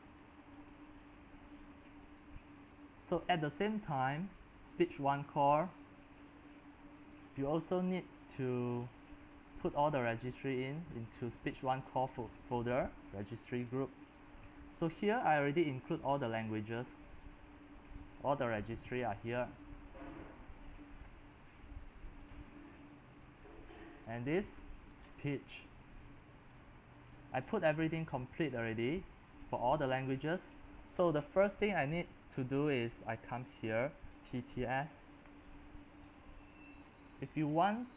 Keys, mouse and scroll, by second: 0.3-5.3 drag, 5.3 right click, 6.2-13.6 drag, 13.6-15.8 scroll down 3, 15.8-18.2 scroll down 13, 18.2 middle click, 18.2 scroll, 18.6-25.1 drag, 25.1-26.1 right drag, 26.1-27.8 drag, 27.8-29.8 middle drag, 27.8-29.8 scroll down 19, 29.8-34.2 drag, 34.0-35.2 typing, 36.1-37.9 drag, 37.9 scroll down 2.